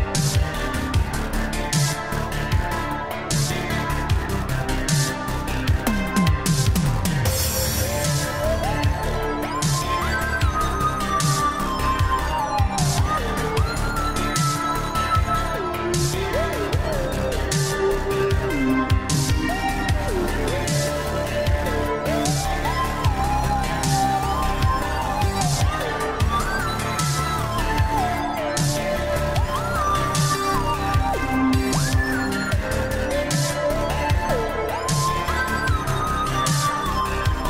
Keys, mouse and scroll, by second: 1.2 click, 4.0 right click, 7.8 1, 8.0 click, 8.2 1, 10.3 click, 10.5 1, 11.3 Return, 12.5 click, 18.9 space, 23.0 Return, 25.1 click, 29.3 click, 34.1 right click, 35.1 click.